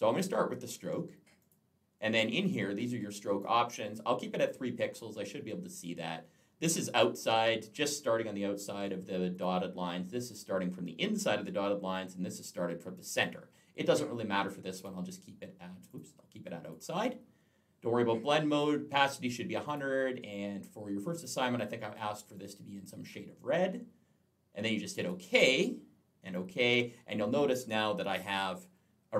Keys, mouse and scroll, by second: 1.2 click, 2.3 click, 9.2 click, 14.6 click, 15.7 click, 16.5 click, 19.5 click, 20.8 click, 22.1 click, 24.8 click, 26.1 click, 28.2 alt+scroll up 1.